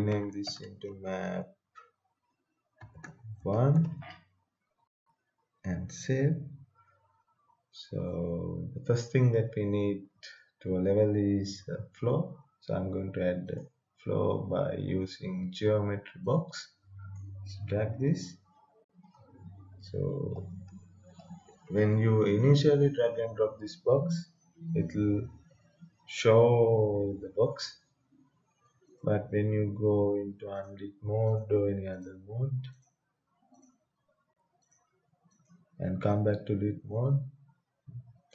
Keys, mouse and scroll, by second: 0.3-1.7 typing, 2.7-4.2 typing, 6.7 click, 8.0-12.3 right drag, 13.5 click, 16.3 click, 18.4 right click, 18.9-22.1 typing, 24.8 click, 26.3-28.9 right drag, 28.9 click, 36.6-38.3 right drag.